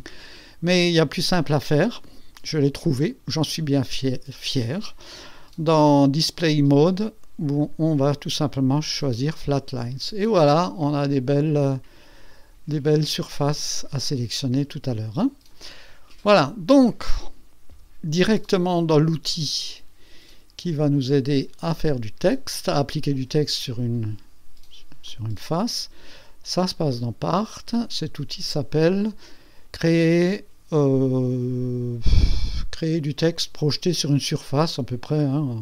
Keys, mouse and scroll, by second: 2.9 click, 6.8 click, 7.6 click, 8.5 click, 9.8 click, 10.4-11.2 drag, 12.7 click, 13.4 click, 14.7 click, 16.2-16.9 drag, 17.7 KP_2, 25.1 click, 26.8 click.